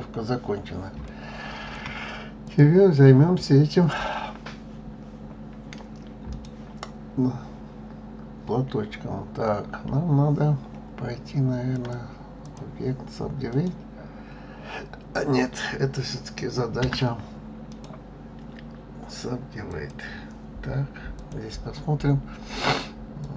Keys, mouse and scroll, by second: 0.1-0.8 scroll down 3, 0.8-2.1 shift+middle drag, 2.1 click, 6.0-9.1 right drag, 11.4-13.2 drag, 13.2-16.3 right drag, 16.5 Tab, 17.4-20.5 right drag, 20.9 click, 23.0-23.3 drag.